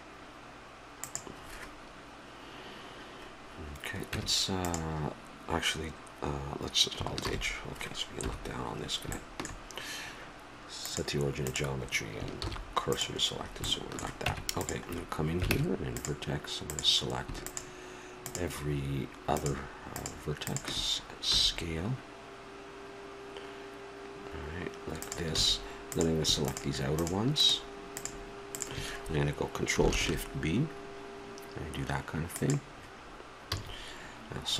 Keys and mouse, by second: 4.1 Tab, 7.2 shift+h, 8.2 KP_7, 9.2-10.8 middle drag, 10.8-12.7 drag, 12.4 shift+s, 13.4 middle click, 14.2 Tab, 15.5 ctrl+Tab, 16.7 right click, 21.3 s, 25.4 a, 25.9-30.5 drag, 29.9 ctrl+shift+b, 33.5 a.